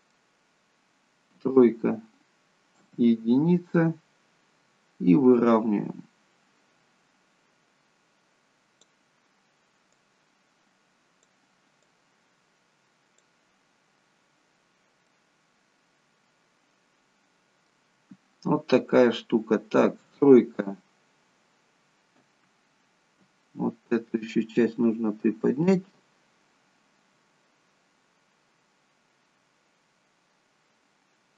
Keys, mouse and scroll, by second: 1.4 KP_3, 2.8 KP_1, 5.3 click, 10.0 click, 13.7-14.6 scroll up 2, 14.6-14.9 scroll up 2, 15.1 middle click, 20.0 KP_3, 22.2 KP_1, 25.8 click.